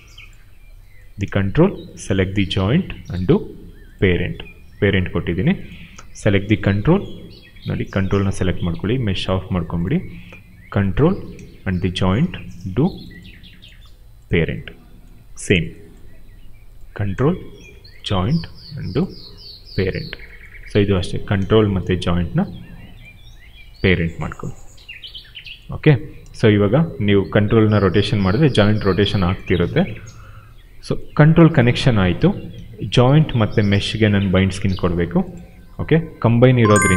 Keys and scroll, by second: 27.9 e, 29.5 ctrl+z, 32.5 q.